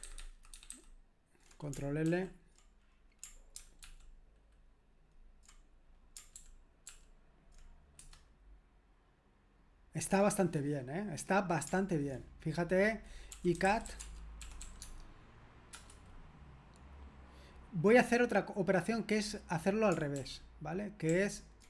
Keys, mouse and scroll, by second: 0.0 ctrl+alt+-, 0.2 ctrl+alt+-, 0.3 ctrl+alt+-, 0.5 ctrl+alt+-, 6.9 ctrl+alt+p, 8.0 c, 13.3-15.1 typing, 15.7 Return, 20.2 ctrl+p, 21.1 ctrl+p.